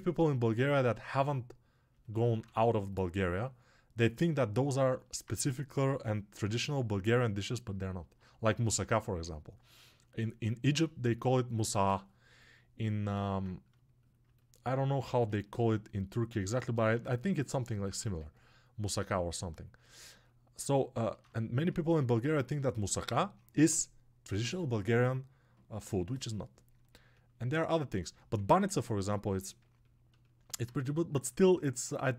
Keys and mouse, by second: 2.3 2, 6.8-15.2 ctrl+drag, 20.9-32.1 alt+drag.